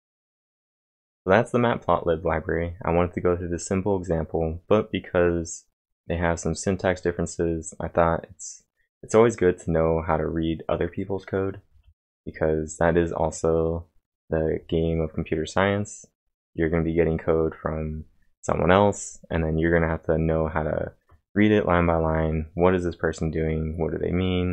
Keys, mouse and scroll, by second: 0.1-2.5 drag, 4.4 click, 5.1 click, 9.4 click, 11.9-12.6 typing, 12.1 click, 13.1 click.